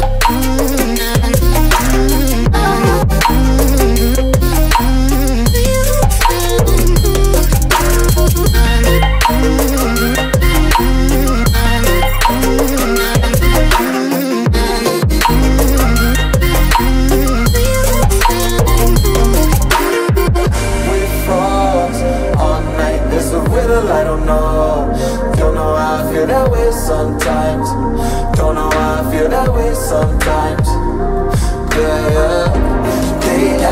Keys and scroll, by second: 0.5 ctrl+d, 1.3 ctrl+[.